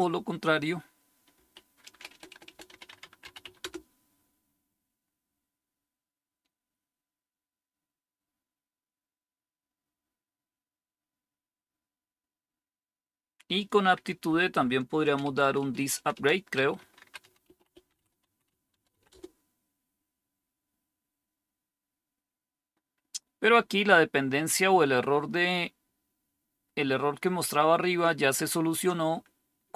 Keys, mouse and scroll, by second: 1.8-3.8 typing, 14.2 Up, 15.0-19.3 typing.